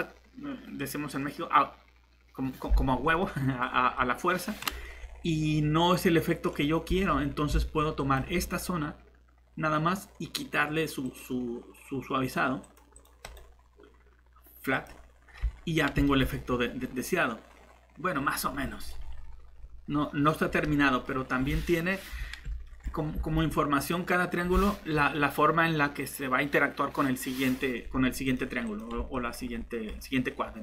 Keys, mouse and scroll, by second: 6.9 Tab, 15.4 Tab, 23.1 shift+Tab.